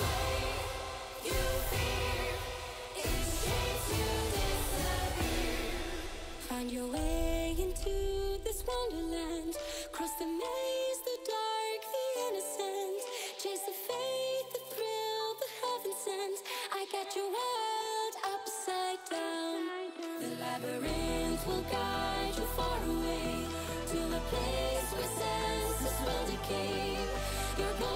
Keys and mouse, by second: 0.4 KP_0, 2.0-3.3 drag, 4.9 click, 6.3 click, 9.4 ctrl+s, 10.5 click, 17.3 click, 20.4 ctrl+s, 21.0 click, 23.4-23.9 drag, 24.3-24.9 drag, 25.6 click, 26.2-27.3 drag, 27.8 click.